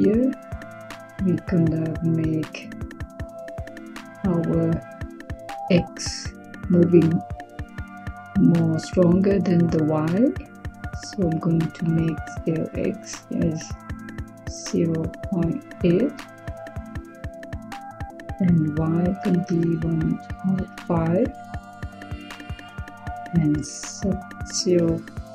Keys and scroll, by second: 14.4-15.5 typing, 19.0-20.5 typing, 23.9-25.3 typing.